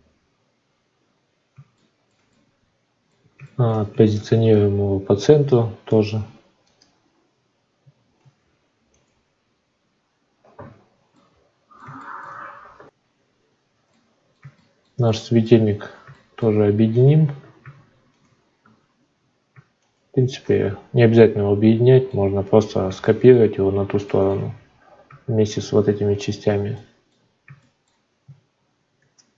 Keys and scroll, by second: 4.2 shift+a, 8.2 ctrl+a, 13.1 F9, 28.9 shift+d.